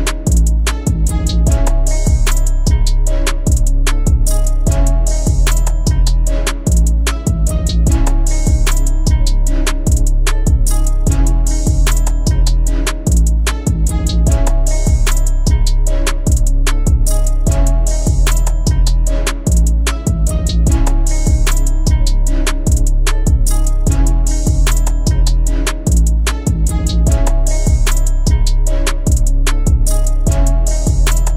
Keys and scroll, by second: 1.7 ctrl+alt+z, 2.0 ctrl+alt+z, 2.3 ctrl+alt+z, 2.8 ctrl+alt+z.